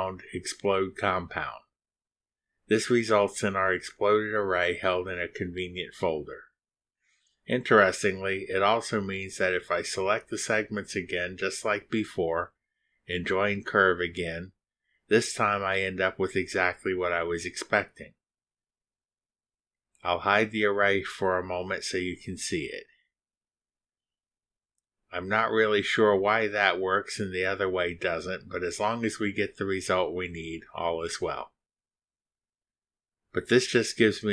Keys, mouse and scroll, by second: 0.3 click, 3.2-4.1 drag, 9.4 click, 10.3 ctrl+click, 11.7 ctrl+click, 12.4 ctrl+click, 13.3 ctrl+click, 14.5 ctrl+click, 15.2 ctrl+click, 15.9 ctrl+click, 17.5 click, 19.0 click, 21.3 click, 22.0 space, 26.0 click, 26.3 space, 28.0 click, 28.8 space, 30.0 space, 33.3 space.